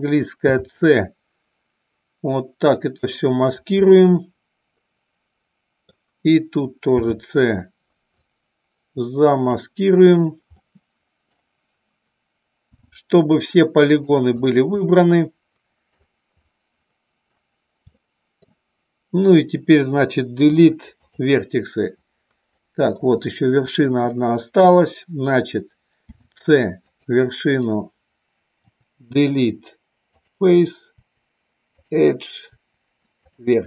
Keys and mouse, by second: 0.3 c, 3.5 right click, 3.8-5.8 middle drag, 7.0 c, 10.1 right click, 10.6 middle click, 12.6 c, 14.2 right click, 14.9-16.0 middle drag, 16.4-17.4 middle drag, 17.9 middle click, 20.5 Delete, 22.6 middle click, 24.0 shift+middle click, 26.1 c, 27.5 right click, 28.6 Delete.